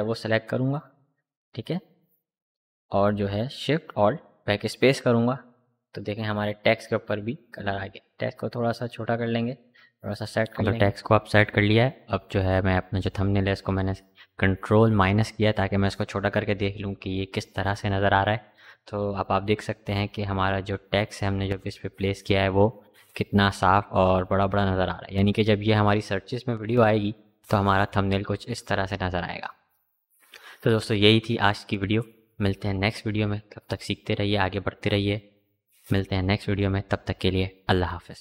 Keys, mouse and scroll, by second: 1.5 v, 5.6 ctrl+t, 6.8-9.2 alt+drag, 9.2 Up.